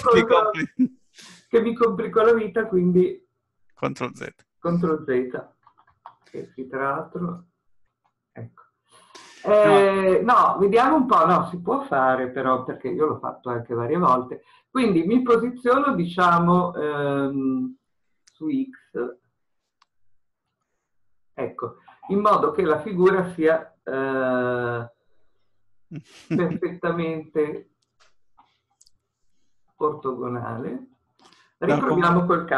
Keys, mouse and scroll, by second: 20.6 click, 25.0-27.0 shift+middle drag, 27.0-27.4 scroll up 1, 28.9 shift+middle click, 29.7-32.5 middle drag, 30.2-32.5 scroll up 2.